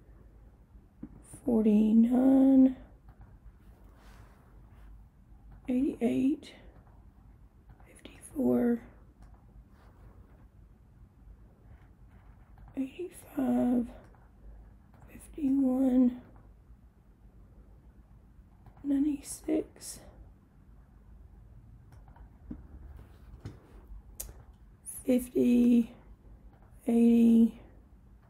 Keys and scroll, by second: 1.4 4, 2.3 9, 3.2 Return, 5.6 8, 5.9 8, 6.8 Return, 7.7 5, 8.2 4, 9.3 Return, 12.7 8, 13.3 5, 14.1 Return, 15.0 5, 15.6 1, 16.3 Return, 18.7 9, 19.4 6, 22.0 Return, 24.3 5, 25.0 0, 25.9 Return, 26.6 8, 27.4 0.